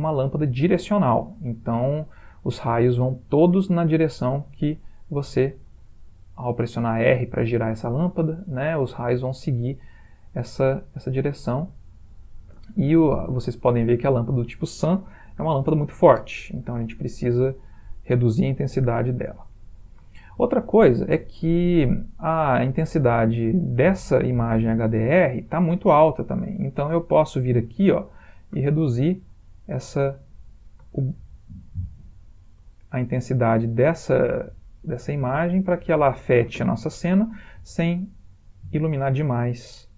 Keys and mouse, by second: 4.4 typing, 4.9 middle click, 5.4 middle click, 5.9 r, 7.4 middle click, 8.4 r, 10.6 r, 12.3 click, 17.4 middle click, 17.5 middle click, 20.3 shift+middle click, 21.4 ctrl+middle click, 22.5 ctrl+middle click, 22.7 shift+middle click, 24.2 ctrl+middle click, 28.2 click, 28.6 middle click, 29.6 click, 37.9 middle click.